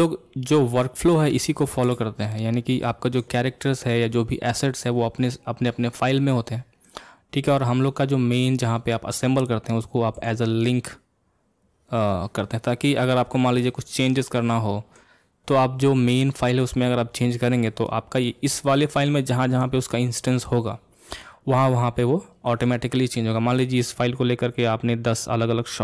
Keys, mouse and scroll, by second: 2.5-2.8 scroll down 2, 2.8-5.8 middle drag, 6.8-9.8 middle drag.